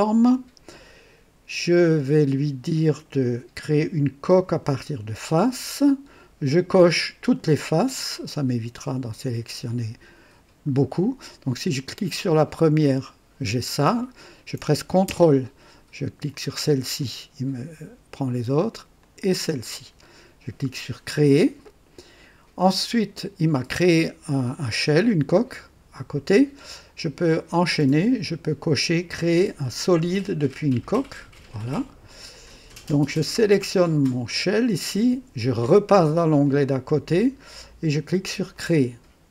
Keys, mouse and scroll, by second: 4.3 click, 7.3 click, 8.3-9.8 drag, 12.1 click, 16.3 ctrl+click, 17.0-18.5 ctrl+drag, 19.0 ctrl+click, 20.7 click, 30.6 click, 32.5 click, 33.2 scroll down 2, 34.3 click, 36.4 click, 38.5 click.